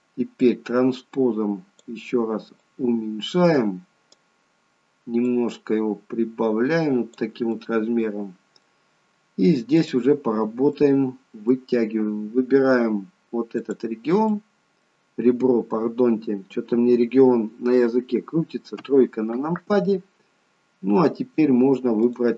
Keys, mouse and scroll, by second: 0.5 click, 2.7 click, 7.5 middle click, 9.8 click, 10.4 scroll up 2, 10.8 middle click, 13.6 click, 14.3 middle click, 18.9 KP_3, 22.1 click.